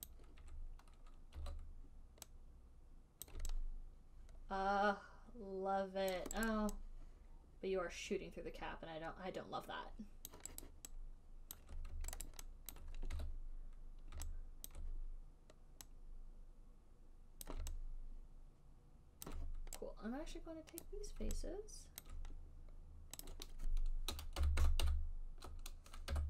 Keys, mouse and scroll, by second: 0.4 click, 1.7 w, 3.6 click, 6.4 alt+click, 6.8 alt+right click, 10.6 alt+right click, 11.0 alt+right click, 11.9 alt+right click, 11.9 alt+middle click, 12.6 alt+click, 13.1 alt+click, 13.1 alt+middle click, 13.5 e, 15.0 alt+click, 17.7 click, 19.5 alt+click, 21.2 right click, 22.4 alt+click, 23.5 right click, 24.8 >, 24.9 >, 25.1 >.